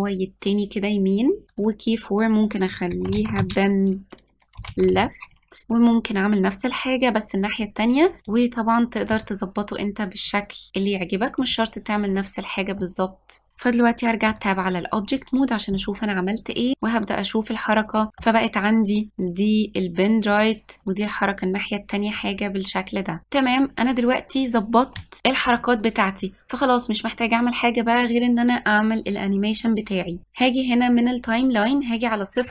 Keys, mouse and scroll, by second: 1.5 click, 1.7-4.8 drag, 8.2 middle drag, 8.3 Tab, 8.4 middle click, 8.8 click, 9.0 g, 9.2 middle click, 9.8 g, 9.9 click, 9.9 g, 10.3 click, 10.4 g, 11.5 g, 12.1 click, 12.1 g, 12.8 middle click, 13.2-14.4 middle drag, 14.4 Tab, 16.7-18.1 drag, 18.1-19.1 middle drag, 19.1-23.2 drag, 25.2 ctrl+s.